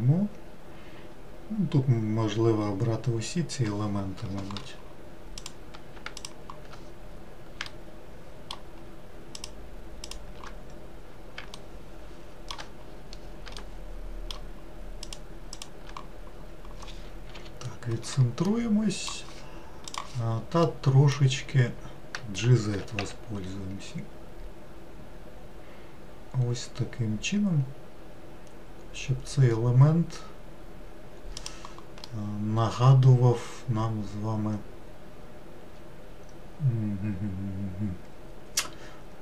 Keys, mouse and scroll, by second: 5.4 click, 6.2 shift+click, 7.7-9.4 shift+middle drag, 9.4 shift+click, 10.1 shift+click, 11.6-12.8 shift+middle drag, 12.8-13.5 scroll down 2, 13.5 scroll down 1, 13.6-15.1 shift+middle drag, 15.1 shift+click, 15.6 shift+click, 16.4-16.8 scroll down 2, 17.4 KP_Decimal, 18.5-22.8 middle drag, 22.8 g, 32.1-35.2 middle drag.